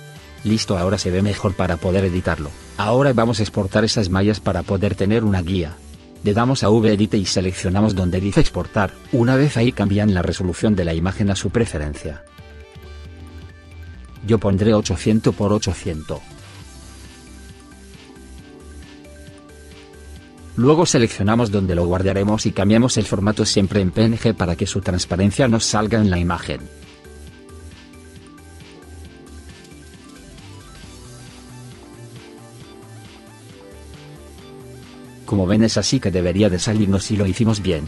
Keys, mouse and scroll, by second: 5.0 middle click, 34.3 click.